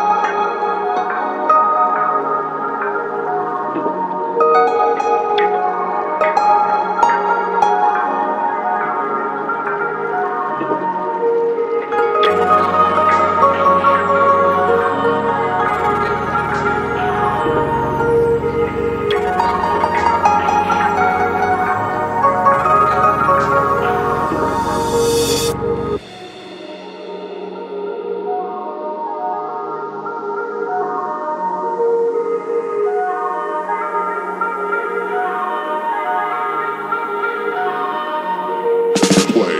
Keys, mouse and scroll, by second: 0.0 click, 0.6-2.3 drag, 3.4-4.1 drag, 4.6 middle click, 5.4-6.0 drag, 7.2 click, 7.8 drag, 8.3 click, 9.4 ctrl+t, 9.8 middle click, 11.2 middle click, 11.6 ctrl+z, 12.2-15.5 drag, 15.6 click, 16.5-18.2 drag, 18.3-19.7 drag, 19.9-21.4 drag, 21.5 click, 22.0 ctrl+s, 23.1-24.1 drag, 24.9-25.4 drag, 26.4 shift+a, 29.7 alt+drag, 30.4 click, 31.2 alt+click, 32.0-36.0 drag, 36.4 click, 36.8-37.1 alt+drag, 37.8-39.5 drag.